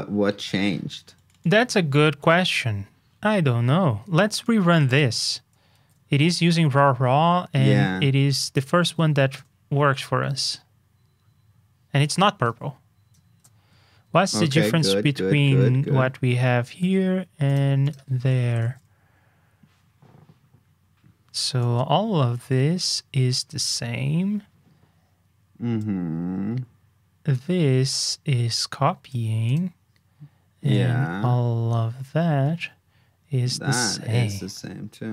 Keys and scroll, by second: 5.7 super+c, 8.5 super+j, 13.3 super+j, 14.3 super+c, 18.6 super+v.